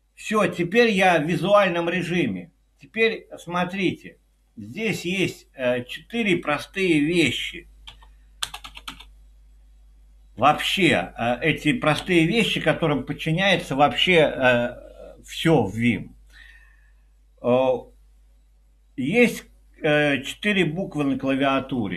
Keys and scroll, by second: 8.0 i, 8.4 Return, 8.6 Return, 8.9 Return, 12.1 Escape, 21.5 i.